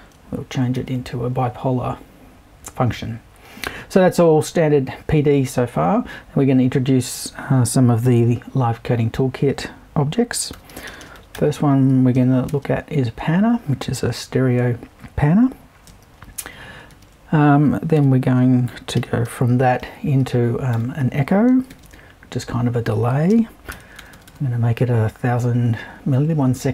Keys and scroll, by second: 0.7 super+l, 10.3-12.2 typing, 16.9 super+i, 18.0 super+e, 19.0 c, 19.2 h, 20.7-22.2 typing, 23.3 space, 23.7 l, 24.0 0.